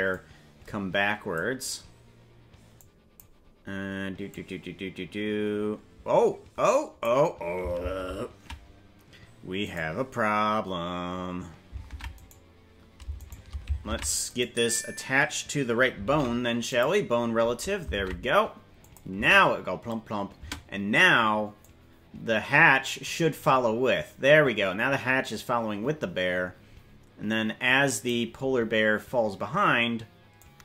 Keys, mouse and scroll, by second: 0.1-1.4 drag, 2.7 click, 4.2-7.0 drag, 8.0 ctrl+z, 9.6 right click, 11.8 ctrl+Tab, 13.2 shift+right click, 13.9 ctrl+Tab, 14.3 right click, 16.0 ctrl+p, 18.0 ctrl+Tab, 18.8 click, 19.2 space, 20.4 space, 21.6-28.1 drag, 30.3-30.6 drag.